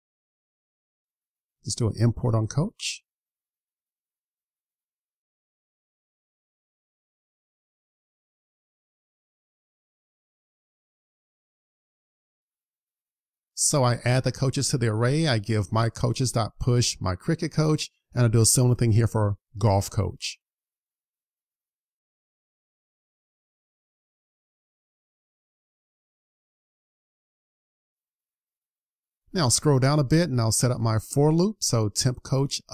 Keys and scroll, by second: 3.6 super+s, 27.0 super+s.